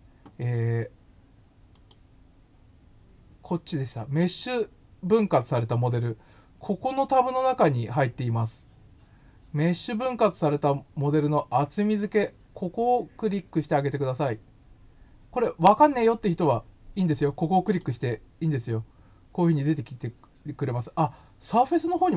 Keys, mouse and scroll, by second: 1.7 click, 17.6 click.